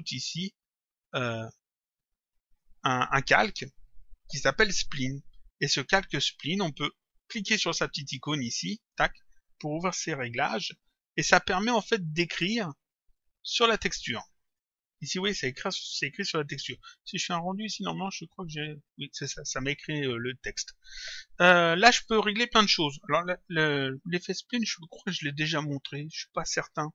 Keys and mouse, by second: 1.7 click, 8.8 click, 11.5 click, 13.1 click, 16.6 click, 17.8 click, 20.6 click, 24.2 click, 26.0 click.